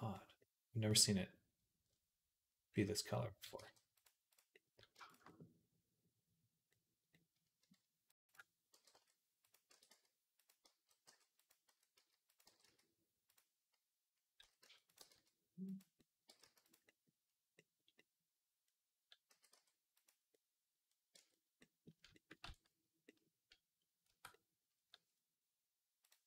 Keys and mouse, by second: 0.0-3.0 drag, 3.0-4.1 right drag, 3.4 g, 4.1-6.7 drag, 8.4-23.9 drag, 8.6 g, 9.5 r, 10.5 g, 11.5 s, 12.3 g, 14.2 s, 14.8 g, 16.1 g, 19.2 s, 21.0 Tab, 22.3 ctrl+s, 23.9 Tab, 24.3 click.